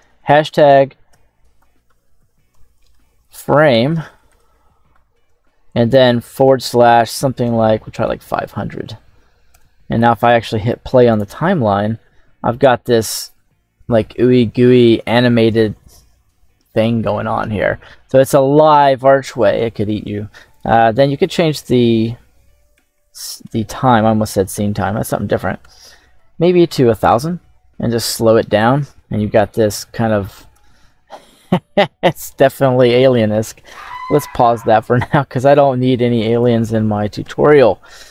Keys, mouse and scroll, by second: 9.4 KP_0, 10.9 click, 13.1 scroll up 1, 13.3-14.6 middle drag, 17.7 scroll down 1, 20.5-27.0 drag, 22.9 BackSpace, 26.1 KP_0, 28.2 scroll up 1, 29.5-30.5 shift+middle drag, 35.3 click, 36.0 click, 36.6 scroll down 2, 37.1 KP_7, 37.5-38.1 scroll up 1.